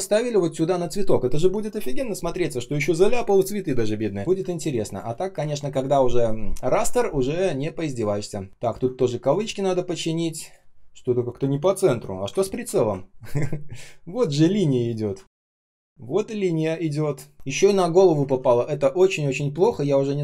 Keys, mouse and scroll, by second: 4.2 ctrl+scroll down 1, 4.3 space, 4.8 space, 4.8 space, 5.3 ctrl+shift+3, 6.8 ctrl+shift+3, 8.0-9.9 typing, 8.5 ctrl+click, 11.6 ctrl+click, 12.3-12.9 ctrl+scroll up 1, 12.9-14.0 ctrl+scroll down 1, 15.1 shift+r, 17.3 ctrl+z, 18.2 ctrl+z.